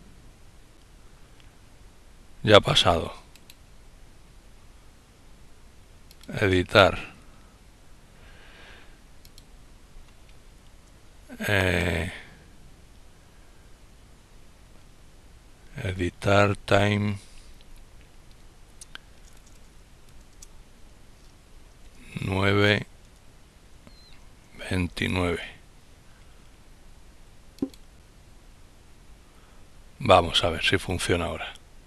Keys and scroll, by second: 20.4 typing, 22.7-23.5 typing.